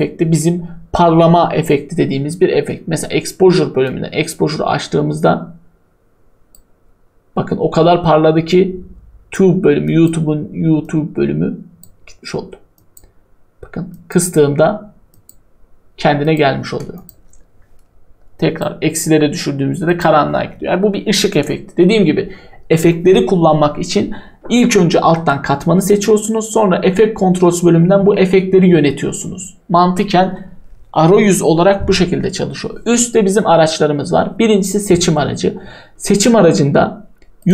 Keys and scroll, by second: 20.1 Delete.